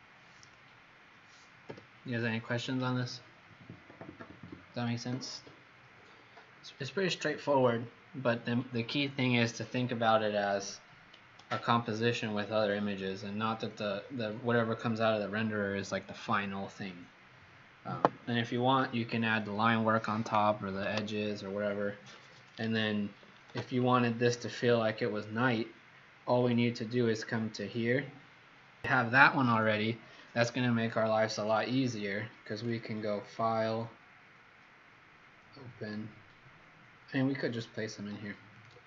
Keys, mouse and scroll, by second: 1.6 x, 2.0 click, 26.3 click.